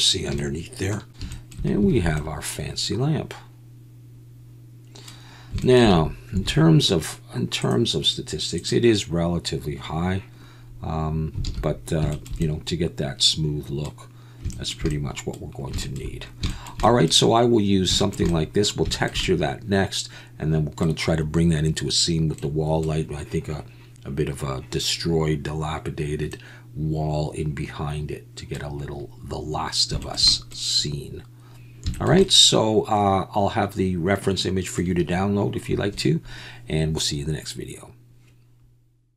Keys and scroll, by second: 1.9 alt+a, 6.3 a, 11.4 alt+a.